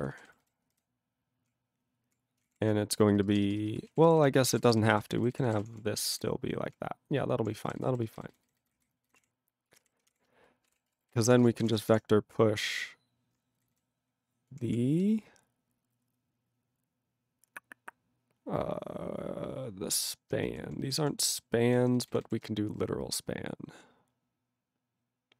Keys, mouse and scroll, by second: 0.1 ctrl+n, 0.2 ctrl+w, 0.3 ctrl+n, 0.4 ctrl+n, 0.7 ctrl+y, 1.5-2.1 ctrl+p, 2.4 ctrl+o, 2.4 Tab, 3.0-3.5 typing, 4.0 ctrl+a, 4.0 ctrl+k, 4.2 ctrl+k, 4.5 ctrl+p, 4.6 ctrl+space, 4.6 ctrl+n, 4.8 ctrl+n, 4.9 ctrl+n, 5.0 ctrl+n, 5.2 ctrl+n, 5.4 ctrl+n, 5.5 ctrl+w, 5.6 ctrl+p, 5.7 ctrl+p, 6.0 ctrl+n, 6.2 ctrl+y, 7.2 ctrl+p, 7.6 ctrl+k, 7.7 ctrl+n, 7.9 ctrl+n, 8.2 ctrl+n, 8.3 ctrl+n, 8.6 ctrl+n, 8.7 ctrl+o, 8.8 ctrl+n, 9.1 ctrl+n, 9.2 Tab, 9.7 ctrl+a, 9.8 ctrl+k, 10.0 ctrl+o, 10.1 Tab, 10.4-12.4 typing, 13.6 ctrl+n, 13.7 ctrl+n, 14.5 ctrl+p, 14.6 ctrl+p, 20.6 ctrl+p, 20.8 ctrl+p, 21.2 ctrl+p, 21.7 ctrl+n, 21.8 ctrl+n, 21.9 ctrl+n, 22.1 ctrl+n, 22.2 ctrl+n.